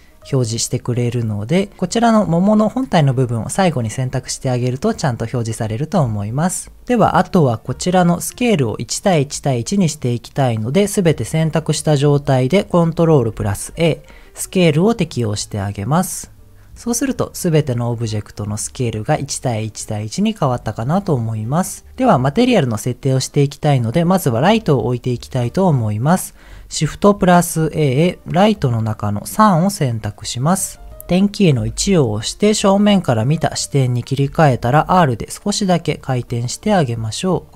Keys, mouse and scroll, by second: 0.3 click, 0.7 click, 1.0 click, 1.7 shift+click, 2.3 shift+click, 2.7 shift+click, 6.1 s, 7.1 click, 7.6 click, 8.2 click, 10.2 click, 11.4 middle click, 11.7-12.4 scroll up 2, 12.5 scroll up 1, 13.3 ctrl+a, 17.3 click, 17.9 click, 18.3 click, 20.6 click, 21.0 middle click, 24.5-25.4 scroll down 3, 25.6 middle click, 27.2 shift+a, 30.6-30.9 scroll down 1, 31.7 KP_1, 34.7 r, 35.9 click.